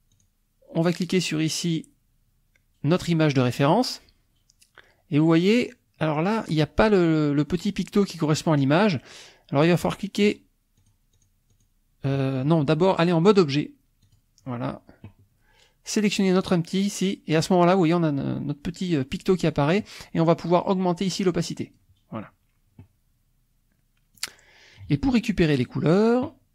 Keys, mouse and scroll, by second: 0.1 click, 9.6 click, 10.4 click, 10.9 click, 11.1 click, 11.5 click, 13.3 click, 14.2 click, 16.4 click, 19.4 click, 21.1 click, 24.2 click.